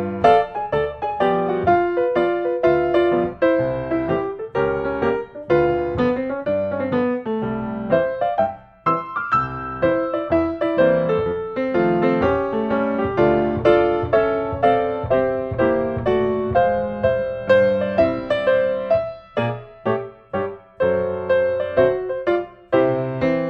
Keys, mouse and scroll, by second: 1.3-2.6 middle drag, 1.3-2.2 scroll up 1, 2.2-2.6 scroll up 1, 2.6-3.6 drag, 5.3-6.3 middle drag, 5.3-6.2 scroll up 1, 6.2 scroll up 1, 8.9 middle click, 9.7 right click, 11.0 click, 11.9 n, 13.2 scroll, 13.6 s, 14.4 click, 15.6 click, 17.6 click, 18.7 click, 20.3 click, 21.4 click.